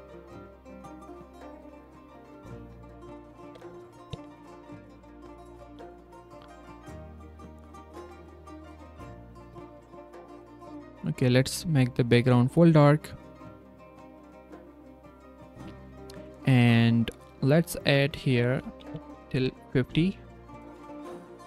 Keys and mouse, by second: 1.4 r, 2.5 s, 4.7 z, 7.9 s, 18.0-19.3 drag, 20.8 s.